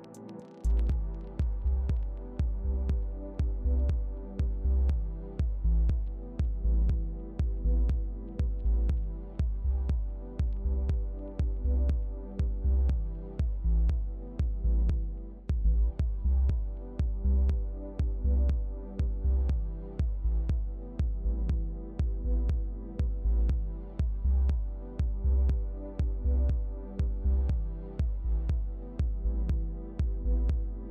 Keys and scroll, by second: 15.3-16.3 typing.